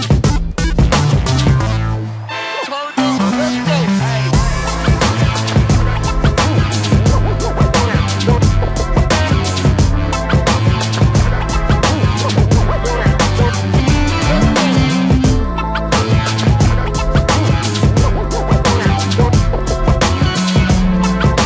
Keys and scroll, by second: 1.9 Escape, 7.4 space, 7.6 Escape.